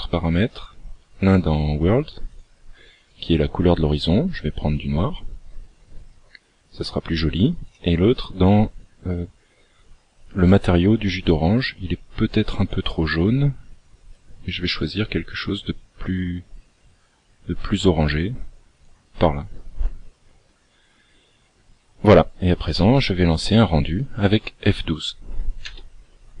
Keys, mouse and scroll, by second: 0.7 click, 3.3 click, 7.9 click, 10.4-11.3 scroll down 3, 11.3-12.6 scroll down 2, 12.8 click.